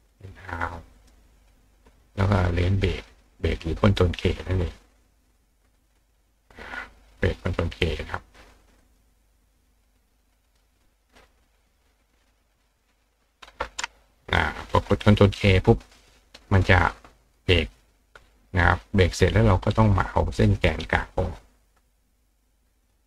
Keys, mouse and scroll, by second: 0.1 drag, 0.9 click, 2.1 click, 5.6 click, 8.8 click, 10.5 click, 11.1 click, 11.6 click, 12.6 click, 18.6 click, 19.7 click, 20.8 click, 22.5 click.